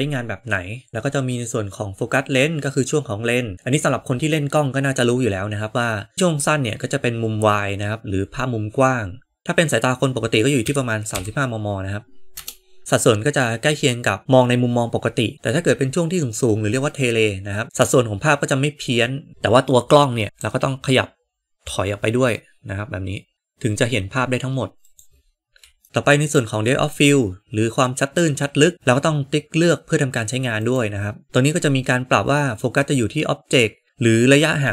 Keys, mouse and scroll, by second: 6.2-12.8 drag, 15.3-19.3 drag, 20.3 g, 25.8 shift+middle click, 26.1 click, 30.6 click.